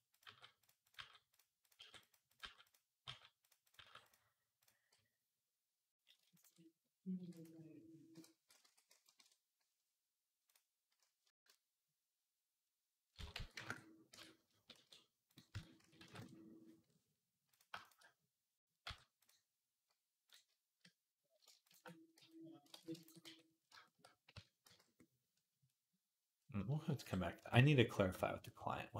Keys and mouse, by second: 0.0-3.6 typing, 0.0-17.3 middle drag, 7.0 e, 8.5 s, 11.2 ctrl+z, 13.0 s, 14.0 Tab, 14.6 shift+s, 15.4 Tab, 15.6 s, 17.3 click, 17.4-20.6 shift+middle drag, 18.7 m, 21.7 middle click, 22.0 f, 22.6 ctrl+z, 23.1 f, 23.2-27.2 middle drag, 24.1 Tab, 24.5 z, 26.9 KP_7, 27.2 Tab.